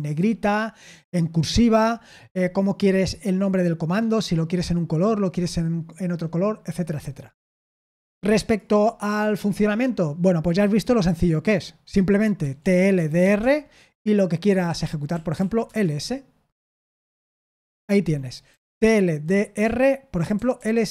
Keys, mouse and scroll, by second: 12.7-13.7 typing, 15.4-16.1 typing, 18.5-20.9 typing.